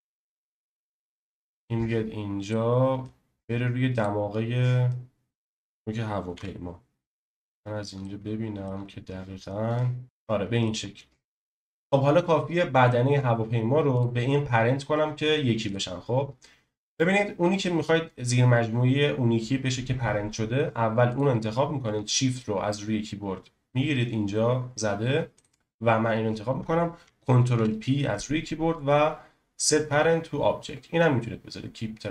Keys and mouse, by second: 3.0 click, 4.9 click, 6.3 KP_7, 8.0-8.7 shift+middle drag, 10.0 middle drag, 13.9 click, 21.1 click, 27.5 ctrl+p.